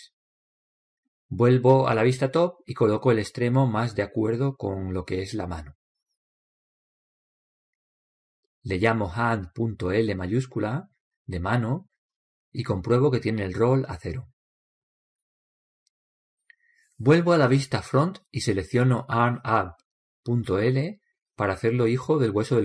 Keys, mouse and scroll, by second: 3.9 KP_7, 6.0 click, 16.9 click, 21.2 KP_1, 22.3-22.6 right drag.